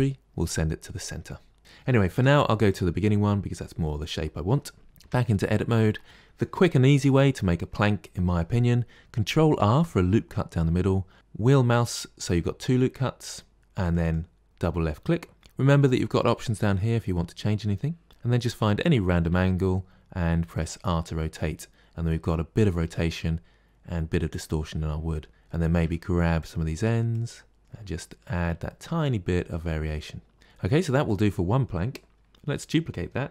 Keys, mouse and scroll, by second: 1.6 click, 2.0 Delete, 2.5 click, 4.9 Tab, 9.4 ctrl+r, 18.0-19.1 middle drag, 19.1 r, 20.9-24.6 middle drag, 24.6 scroll up 2, 25.3 click, 25.7 g, 27.0 click, 27.6 g, 27.7 middle click, 28.1 Tab, 28.5-30.5 middle drag, 30.5-30.9 scroll down 2, 30.9-33.3 middle drag.